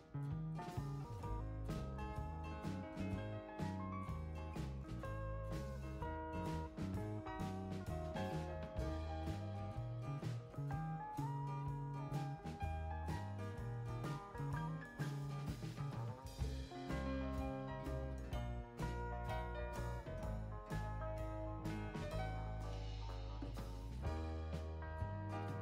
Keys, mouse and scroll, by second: 2.0 click, 3.8 2, 4.4 5, 5.4 Return, 9.3 click, 13.0 click, 15.3 click, 20.5 click, 25.3 click.